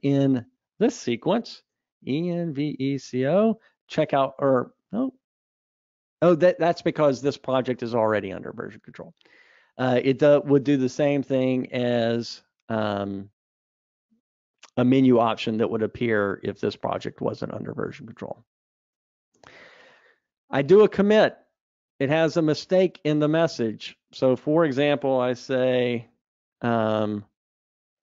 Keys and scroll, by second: 5.0 ctrl+shift+super+a, 18.1 super+Up, 25.7 ctrl+v, 27.2 super+k.